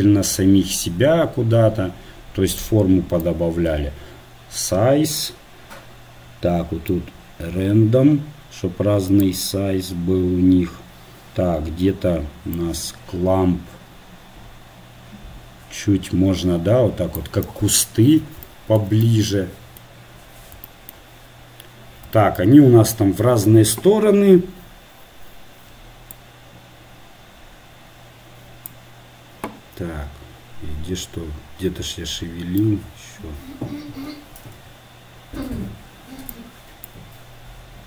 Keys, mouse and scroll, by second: 3.4-5.3 drag, 7.2-8.6 drag, 12.8-14.5 drag, 17.5-18.6 middle drag, 26.2-27.9 drag, 32.8-34.7 drag, 37.0-37.8 drag.